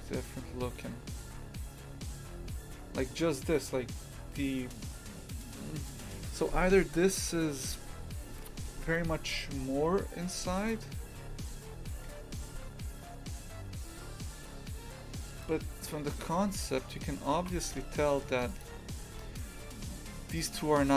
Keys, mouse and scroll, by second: 10.4 Tab, 10.6 right click, 11.0 Tab, 12.0 g, 15.8 scroll down 1, 16.1-17.4 middle drag, 17.4 shift+f.